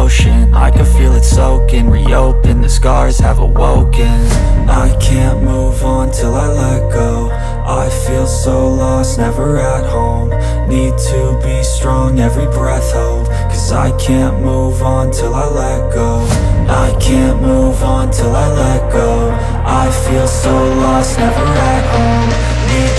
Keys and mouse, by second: 0.2-1.8 middle drag, 1.8-4.6 drag, 3.6 s, 4.6-7.3 middle drag, 7.3-13.2 drag, 11.9-15.4 typing, 13.2-22.9 middle drag, 17.1 KP_1, 17.6 KP_3, 17.6 g, 18.4 r, 20.8-22.9 drag.